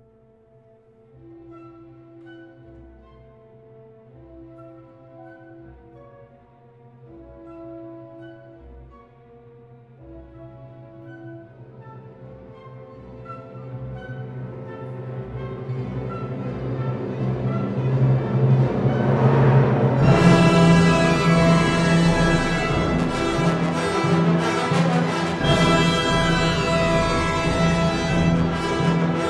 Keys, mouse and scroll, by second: 2.4 alt+click, 3.0 KP_7, 4.4 g, 7.6 click, 10.3 g, 12.1 click, 15.5 Tab, 16.6 Tab, 17.8 2, 18.0 alt+3, 18.0 alt+click, 19.8 s, 21.1 click, 21.7 super+z, 25.7 s, 27.6 shift+click, 28.4 Tab.